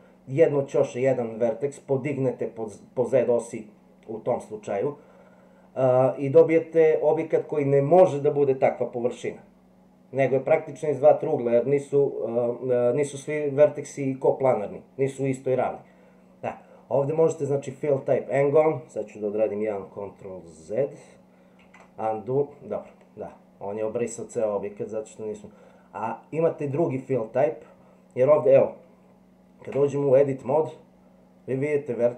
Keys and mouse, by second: 21.6 ctrl+z, 24.4-26.7 drag, 29.7 Tab.